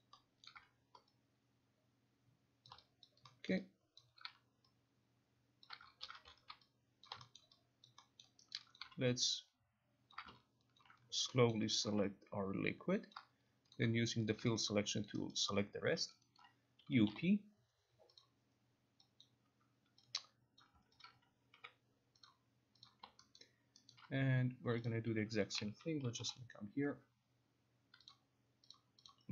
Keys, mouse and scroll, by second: 0.0 alt+middle click, 0.6 alt+middle click, 2.8 shift+click, 3.1 alt+click, 3.6 alt+middle click, 4.1 alt+click, 4.9 alt+click, 5.8 shift+click, 6.1 ctrl+z, 7.2 shift+click, 7.4 alt+middle click, 8.0 alt+click, 8.3 alt+middle click, 8.6 alt+right click, 8.9 alt+click, 10.2 shift+click, 10.9 ctrl+click, 11.2 alt+click, 11.6 alt+middle click, 11.9 alt+click, 13.2 shift+click, 13.9 click, 14.4 shift+click, 15.2 alt+click, 15.4 alt+middle click, 16.0 alt+right click, 16.9 alt+right click, 16.9 u, 17.2 Up, 18.3 click, 19.3 click, 20.7 click, 21.1 ctrl+click, 21.7 alt+g, 22.4 click, 23.0 click, 23.5 alt+right click, 24.0 alt+right click, 25.0 click, 25.3-26.8 typing, 28.2 click, 28.9 click, 29.2 click.